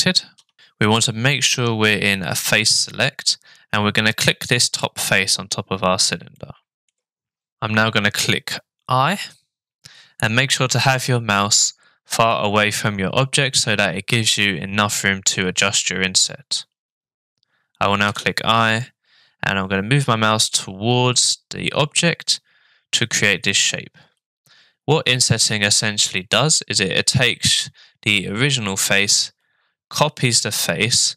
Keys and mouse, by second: 0.4 Tab, 4.2 click, 4.8 middle click, 6.3 shift+middle click, 18.1 i.